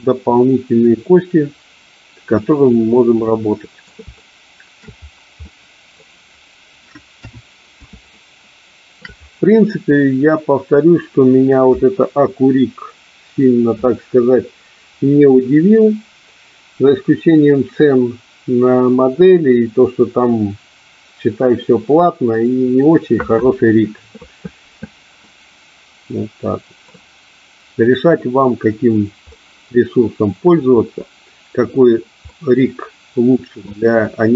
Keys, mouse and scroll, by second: 3.4 middle click, 4.3 shift+middle click, 5.5-6.1 middle drag, 7.3 KP_1, 8.3-9.1 shift+middle drag, 25.5-26.9 middle drag, 29.4-30.7 middle drag, 32.5-33.8 middle drag.